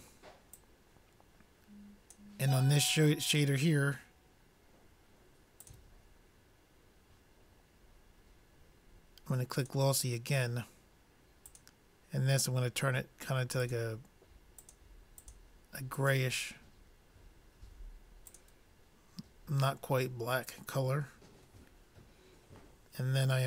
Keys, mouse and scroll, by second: 1.0-2.5 drag, 6.2-7.6 drag, 12.2-13.6 drag.